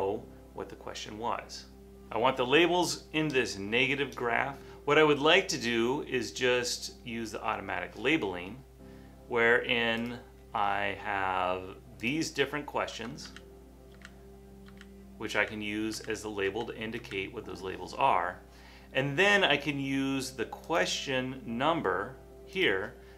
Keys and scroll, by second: 13.5 Down, 14.0 Down, 14.7 Down, 15.4 Down, 16.0 Down, 16.5 Down, 17.0 Down.